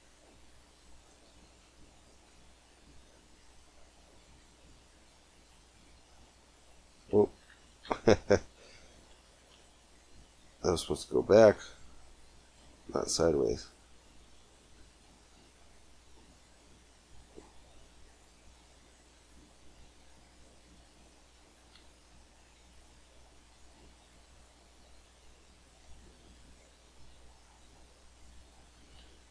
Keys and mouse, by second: 1.6-3.0 drag, 2.2 g, 4.5 g, 7.1 ctrl+z, 7.3 ctrl+z, 7.7 ctrl+z, 11.4 click, 12.0-14.2 middle drag, 14.5 g, 20.4-22.4 drag, 21.5 g, 25.7 c, 28.3-29.3 drag.